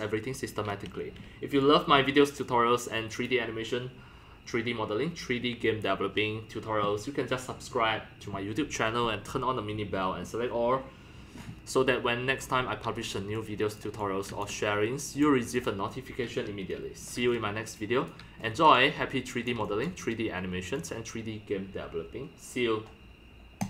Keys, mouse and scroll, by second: 1.5-2.1 scroll, 3.3-7.0 drag, 7.1 click, 7.4 click, 8.6 click, 13.3 click, 13.8 click, 13.9 x, 14.4-15.2 drag, 15.4 drag, 15.9 click, 16.7 click, 16.8-19.6 typing, 17.3 click, 18.1 click, 18.4 scroll down 3, 18.9-21.1 drag, 22.1 click, 22.9 click.